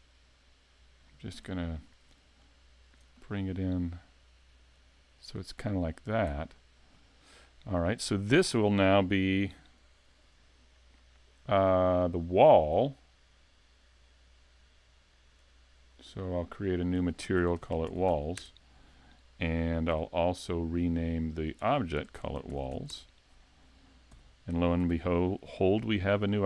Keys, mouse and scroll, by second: 2.4 alt+click, 3.2 middle click, 4.8 click, 6.5 scroll down 3, 7.5 middle click, 8.0 scroll up 4, 8.4 shift+middle click, 15.4 click, 16.3 click, 16.8 click, 18.1 l, 19.9 n, 21.5 click, 22.6 l, 24.1 n, 24.9 s, 26.0 middle click.